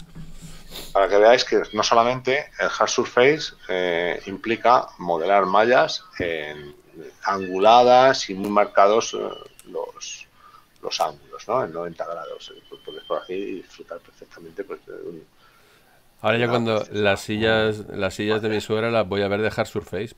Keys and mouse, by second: 18.0 click.